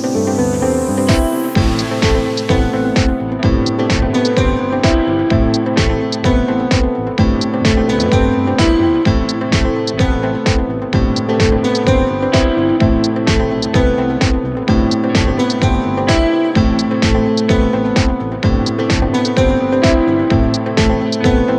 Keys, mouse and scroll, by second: 1.0 BackSpace, 2.1 ctrl+space, 4.1-5.7 drag, 6.9 ctrl+t, 7.9-8.6 drag, 17.8 ctrl+t, 18.7-20.1 drag.